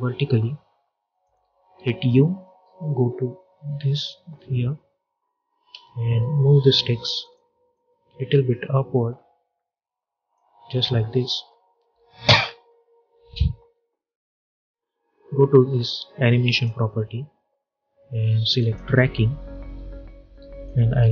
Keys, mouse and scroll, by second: 1.6-2.7 typing, 5.6 v, 6.2 alt+scroll up 1, 7.1-12.9 drag, 7.9-10.5 shift+drag, 14.1 click, 16.4-21.1 drag.